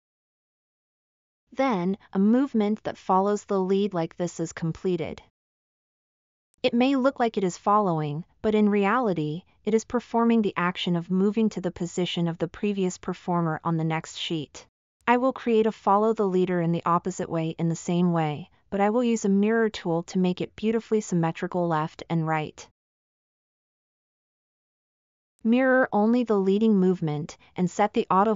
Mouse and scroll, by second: 10.1-10.7 middle drag, 12.3-13.5 middle drag, 24.4 middle drag.